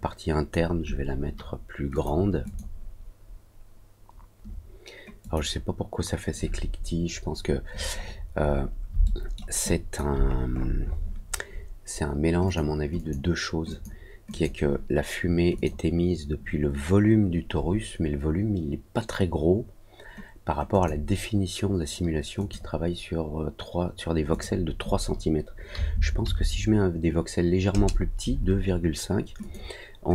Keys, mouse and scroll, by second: 1.9 click, 2.4 click, 5.1 click, 7.9 middle click, 8.3 scroll up 1, 9.0 alt+middle click, 9.6 alt+click, 10.2-10.6 scroll up 2, 10.6 scroll down 1, 10.8 scroll up 1, 12.4 click, 12.9 click, 13.6 click, 14.2 click, 15.5 click, 20.6 click, 22.3 click, 24.2 click, 29.3 click.